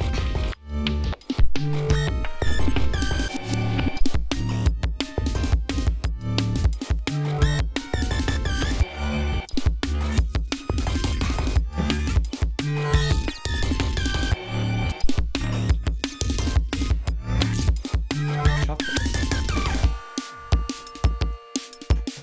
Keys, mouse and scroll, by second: 4.9 ctrl+scroll down 2, 5.1-5.4 ctrl+scroll up 2, 13.9 ctrl+scroll down 2.